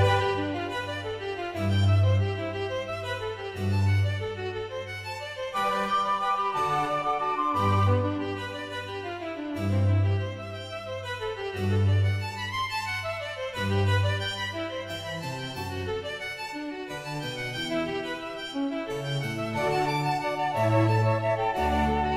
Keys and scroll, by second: 14.0 space, 14.8 ctrl+alt+z, 16.5 ctrl+alt+z, 17.9 [, 18.9 space.